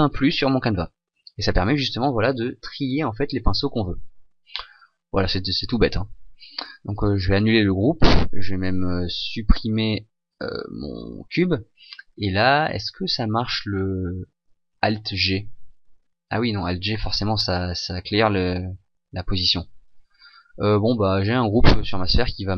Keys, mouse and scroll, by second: 6.9 click, 8.3 right click, 9.0 right click, 10.1 Delete, 11.9 right click, 12.6 right click, 15.1 alt+g, 18.3 click.